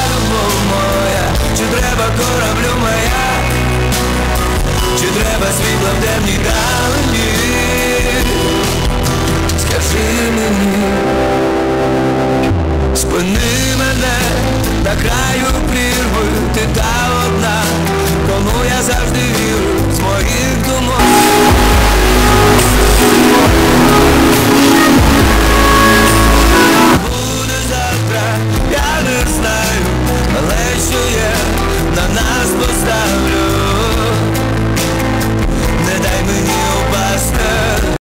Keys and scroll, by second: 26.9 Page_Down.